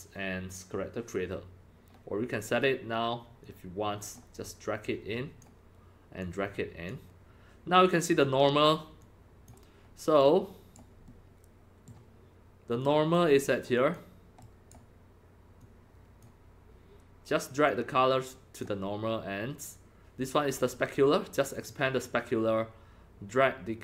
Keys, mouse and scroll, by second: 3.4-10.2 drag, 10.2-10.7 right drag, 11.1 middle click, 12.8 click, 12.8 middle click, 13.8 click, 14.4-14.7 right drag, 15.6 click, 17.7-18.6 drag, 21.5 click.